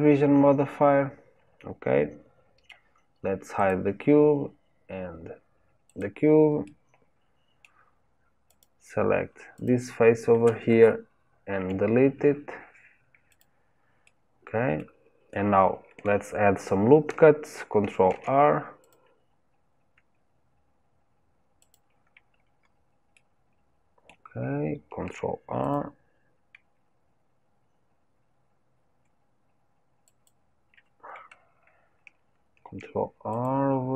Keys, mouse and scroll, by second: 0.9-1.9 scroll up 2, 1.9-3.5 scroll up 1, 3.5 click, 5.8 click, 6.6-8.4 middle drag, 8.4 click, 9.5 click, 11.6 Delete, 14.0-18.1 middle drag, 18.1 ctrl+r, 22.0-23.1 scroll up 3, 23.1-25.0 middle drag, 25.0 ctrl+r, 32.6 ctrl+r.